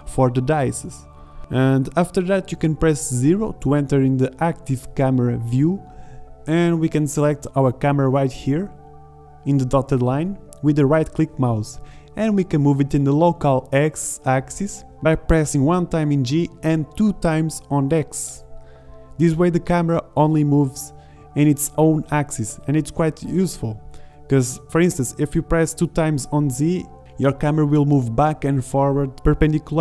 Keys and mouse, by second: 2.5 KP_0, 11.1 g, 24.5 g, 27.4 g.